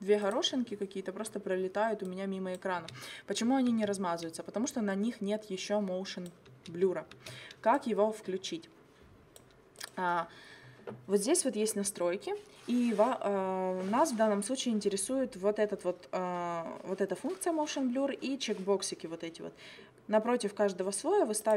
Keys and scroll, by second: 2.8 space, 6.5 space.